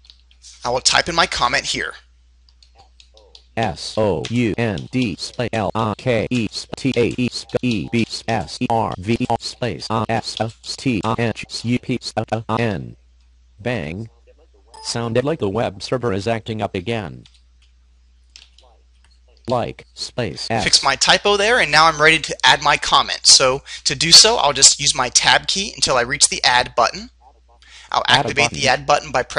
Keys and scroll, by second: 25.5 Tab, 28.9 space.